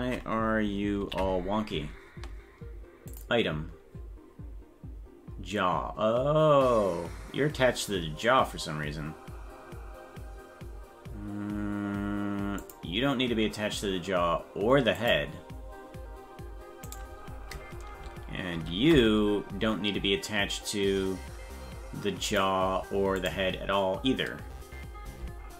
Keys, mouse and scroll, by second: 1.0 ctrl+l, 3.1 click, 12.6 click, 15.0 click, 16.9 right click, 18.6 ctrl+l, 22.3 click, 23.2 click, 25.1 Tab.